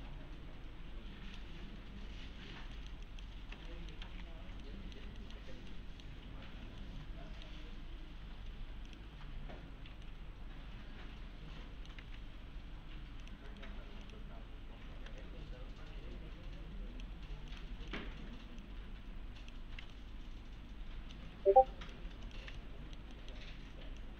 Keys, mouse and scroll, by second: 1.6 1, 2.2-2.5 scroll up 1, 2.5 1, 2.7 middle click, 3.1 click, 3.7 alt+middle click, 4.0 alt+x, 4.6-5.5 alt+middle click, 5.7 alt+middle click, 6.0-6.3 alt+middle click, 6.2 scroll down 1, 6.7 scroll up 1, 7.1-7.7 middle click, 8.9 click, 9.1 scroll up 1, 10.1-11.9 alt+middle click, 12.0 alt+1, 13.2 click, 13.5 right click, 14.0 click, 14.9 s, 15.2-17.1 click, 19.9-21.2 alt+middle click, 21.9 click, 22.3 ctrl+click, 22.6-23.5 alt+middle click, 24.0-24.1 click.